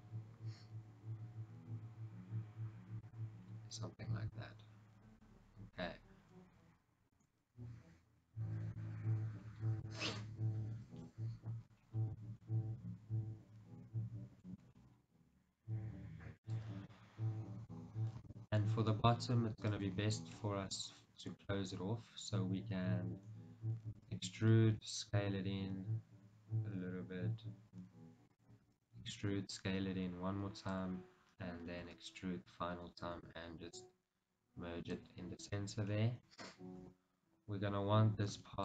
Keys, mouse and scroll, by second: 3.5-4.2 scroll down 2, 4.2-14.2 middle drag, 5.6-6.1 scroll up 2, 6.1-7.3 scroll down 2, 7.3 ctrl+r, 9.6-10.0 scroll down 2, 11.1 KP_1, 12.0-12.3 scroll down 2, 13.8-14.2 scroll up 2, 14.9-16.6 middle drag, 14.9-15.6 scroll down 2, 15.6-16.6 scroll down 1, 16.6 click, 17.1-24.8 middle drag, 18.8-19.9 scroll up 2, 19.9 alt+click, 24.1 e, 24.3 right click, 24.8 s, 28.5 click, 28.8 e, 29.2 s, 31.0 click, 31.9 e, 32.3 right click, 33.4 alt+m, 36.1-38.6 middle drag, 37.0 KP_1, 38.4 ctrl+r.